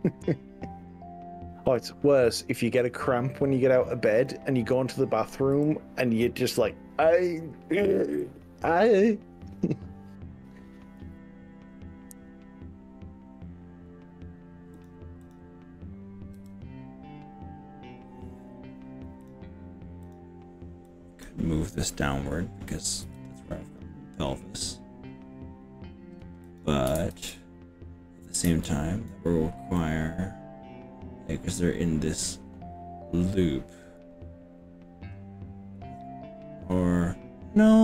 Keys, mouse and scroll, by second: 1.7 drag, 2.7 click, 4.1 click, 5.5 g, 6.6-7.5 scroll up 5, 8.3-9.9 scroll up 9, 11.5-12.1 scroll up 4, 14.9 click, 15.3 click, 16.4 g, 19.3 click, 20.1 click, 20.9-21.3 drag, 23.1 g, 26.5 click, 27.1 ctrl+z, 28.5 ctrl+z, 29.9-32.3 middle drag.